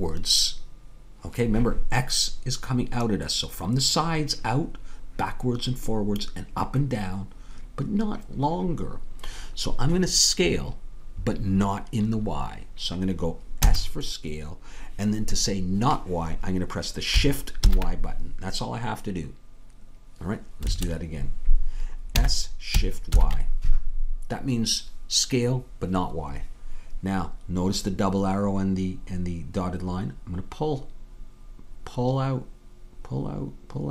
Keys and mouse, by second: 13.6 s, 22.2 s.